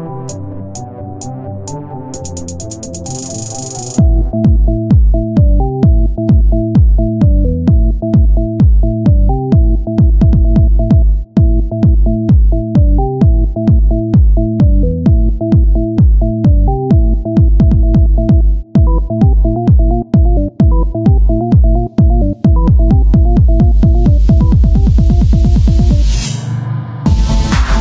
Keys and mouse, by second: 0.4 KP_1, 1.2 ctrl+Tab, 5.7 e, 9.2-12.4 drag, 12.4 e, 18.3-20.1 drag, 20.1 ctrl+KP_1, 26.3 e.